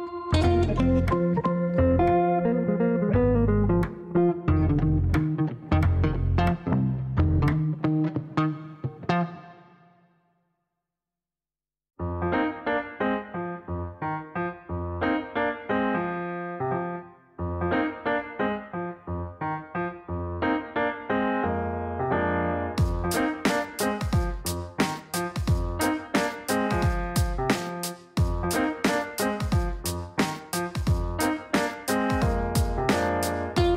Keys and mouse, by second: 0.0 click, 0.7 click, 2.7 click, 3.7 click, 4.4 right click, 5.2 click, 5.7 ctrl+click, 7.1 click, 7.6 click, 8.3 click, 9.0 ctrl+click, 9.8 click, 10.2 click, 11.1 ctrl+click, 12.2 click, 12.9 click, 14.8 click, 15.7 click, 16.8 click, 17.3 click, 17.8 right click, 21.3 click, 22.1 click, 22.4 click, 23.4 click, 24.4-26.0 typing, 29.1-29.9 typing, 30.2 Down, 30.4 Down, 30.6 Down, 30.8 Down, 31.2 Return, 31.8 Return, 33.1 click.